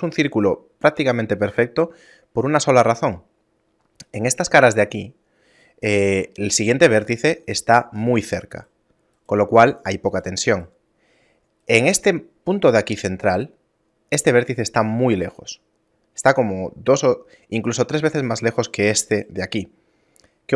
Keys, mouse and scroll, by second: 6.6 right click, 7.5 right click, 9.2 right click, 14.3 right click, 18.6 right click, 19.2 right click.